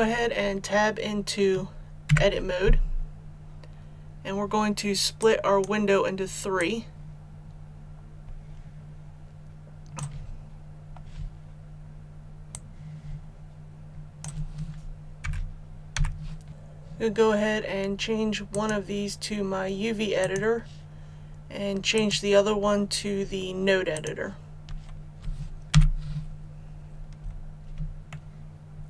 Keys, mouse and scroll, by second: 2.1 Tab, 5.2-10.3 drag, 10.3-11.2 scroll down 1, 12.5-14.9 drag, 15.2 t, 15.9 t, 16.5-19.5 drag, 25.7 n, 26.3 scroll up 1, 28.1-28.8 shift+middle drag.